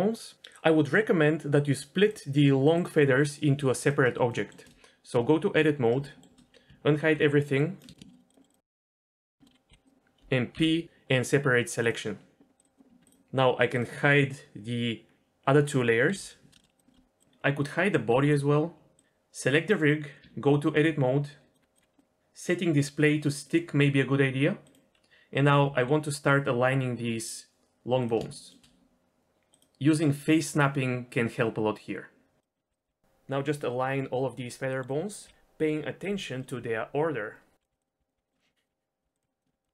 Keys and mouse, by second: 1.9 click, 4.2 shift+middle click, 5.0 Tab, 6.0 shift+middle click, 7.0 alt+h, 7.5 click, 8.1 shift+click, 8.4 shift+middle click, 8.6 shift+click, 9.1 ctrl+l, 9.4 shift+middle click, 9.7 g, 10.5 p, 12.6 click, 12.7 click, 12.9 Tab, 16.0 h, 18.0 h, 20.1 Tab, 21.5 click, 22.0-23.4 drag, 24.6 click, 25.6 g, 28.2 shift+middle click, 29.2-32.4 drag, 32.5 click, 32.8 g, 33.1 middle click, 33.3 KP_Decimal, 33.6 shift+middle click, 33.8 g, 34.1 middle click, 34.7 middle click, 34.9-39.7 typing, 35.2 click, 38.4 shift+middle click, 39.4 click.